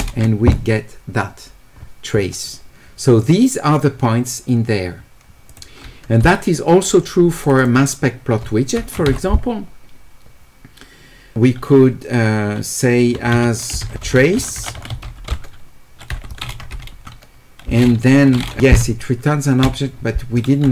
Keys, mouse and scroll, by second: 5.5 click, 7.4 click, 7.6 click, 12.9-14.8 typing.